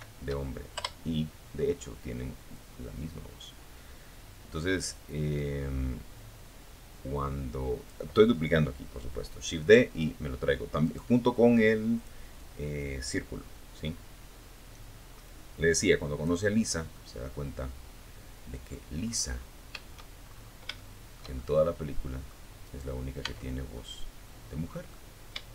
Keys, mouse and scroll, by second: 0.7-6.2 drag, 9.0 right click, 10.1 click, 10.5-14.6 drag, 14.8 scroll down 1, 15.1 middle click, 15.7 click, 16.2 middle click, 17.2-17.8 scroll up 1, 18.4-18.8 shift+scroll up 1, 19.0 shift+middle click, 19.8 middle click, 20.8 right click, 21.5 Tab, 22.0-23.2 middle drag, 23.7 shift+middle click, 24.6-25.5 shift+middle drag.